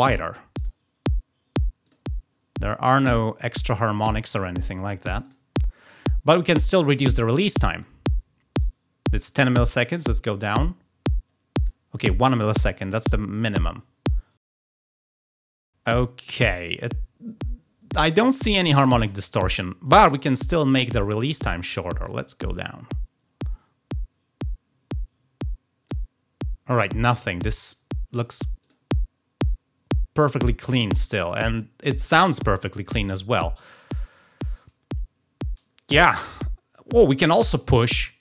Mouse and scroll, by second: 0.5 click, 1.8 click, 5.2 click, 8.5-11.6 drag, 22.0-25.9 drag, 28.6 click, 31.2 click.